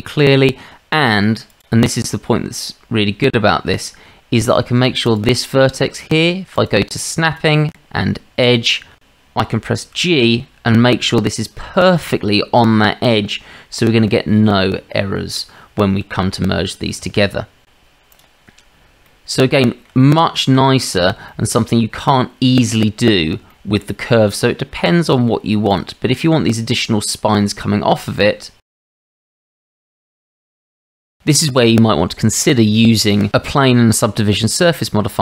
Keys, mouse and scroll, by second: 1.5 click, 3.7 shift+drag, 5.0 click, 6.6 click, 7.3-8.9 drag, 10.0 g, 12.4-13.2 drag, 14.1 click, 14.2 middle click, 17.0 Tab, 18.1 click, 19.1 click, 19.5-19.9 shift+drag, 21.3 shift+middle drag, 23.5 shift+middle drag, 24.3 click, 25.7 click, 27.2 Tab, 28.6-31.4 typing, 28.8 click, 29.7 click, 31.9 Tab.